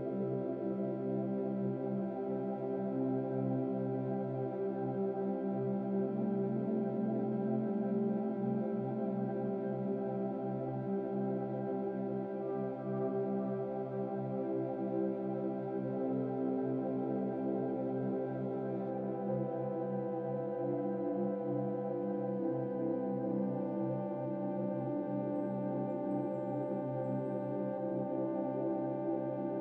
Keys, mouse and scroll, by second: 17.7-19.3 shift+drag, 25.4-27.0 drag.